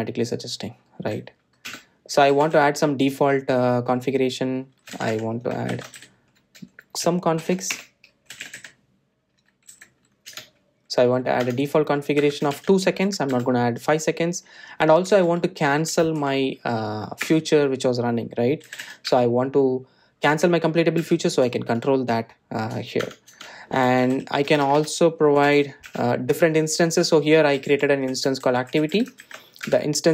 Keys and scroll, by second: 0.5 Return, 4.5 Tab, 11.8 Tab, 18.8 Return, 24.5 Return.